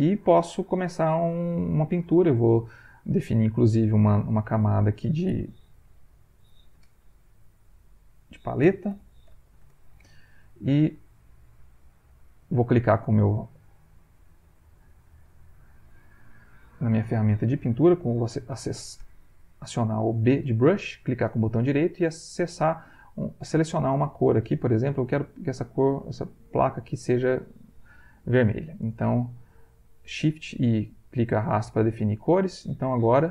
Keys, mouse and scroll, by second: 3.8 click, 4.6 click, 7.8 click, 8.6-10.0 typing, 11.7-14.4 right drag, 14.8 middle click, 18.5 b, 20.7 right click, 23.4-27.6 drag, 28.7 click, 29.2 shift+click, 31.4 click.